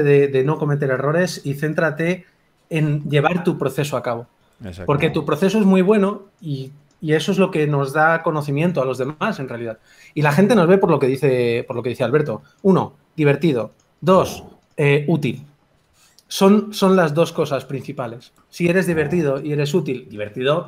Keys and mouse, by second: 0.0 g, 0.0 f.